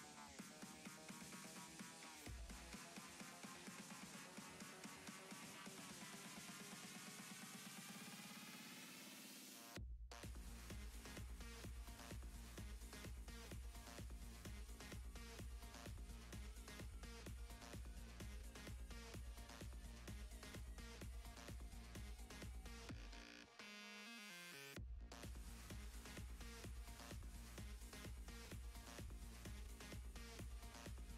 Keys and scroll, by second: 28.1 s, 29.0 s.